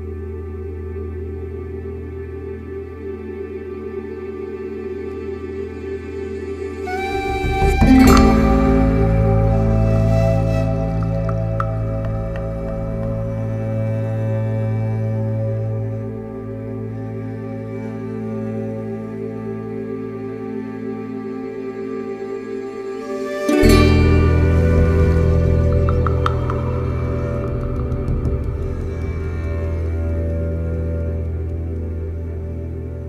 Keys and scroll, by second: 8.2 ctrl+d, 8.4 Escape, 9.7 ], 13.3 4, 16.9 2, 24.1 4, 28.7 3, 32.2 4.